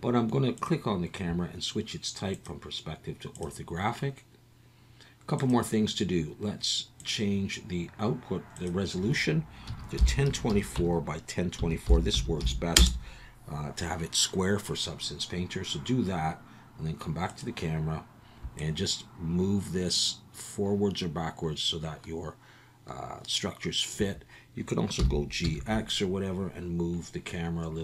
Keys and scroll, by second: 25.0 g, 25.4 x.